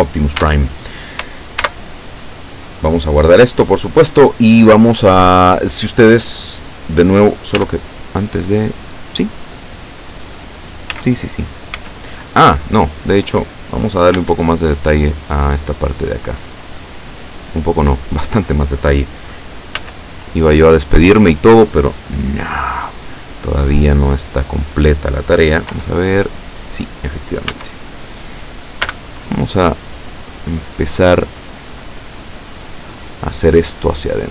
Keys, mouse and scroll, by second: 0.5 Tab, 1.7 ctrl+s, 3.2 click, 7.6 z, 11.0 z, 11.8 z, 12.6-12.9 scroll up 2, 14.2 Tab, 19.9 a, 24.2 right click, 25.8 l, 27.6 a, 28.9 b, 30.7-31.7 drag, 31.7 scroll down 1, 34.1-34.3 drag.